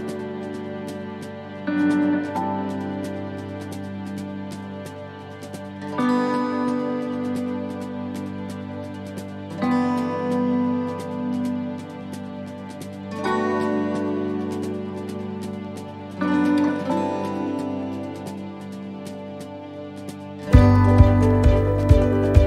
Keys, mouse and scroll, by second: 0.0 middle click, 0.4-0.8 scroll up 4, 0.8 middle click, 1.6-2.1 scroll down 2, 2.6 s, 5.1 click, 6.0 middle click, 6.8 shift+middle click, 7.2-7.6 scroll up 2, 7.6 middle click, 8.8 click, 15.0 s, 18.4 middle click, 20.4 middle click, 20.9 scroll down 1.